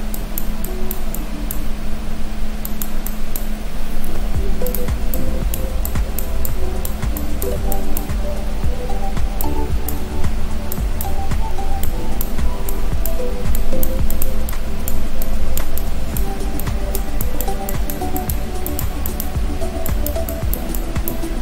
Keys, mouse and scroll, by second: 0.2 click, 4.1 click, 4.1 f, 5.2 click, 5.9 click, 7.2 click, 7.8 click, 10.8 click, 11.9 click, 13.6-21.4 click.